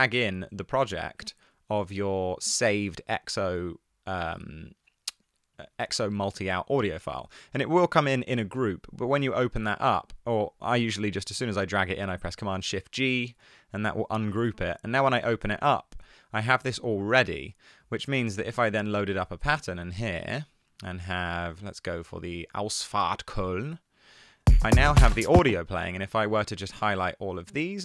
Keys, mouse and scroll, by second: 12.7 shift+super+g.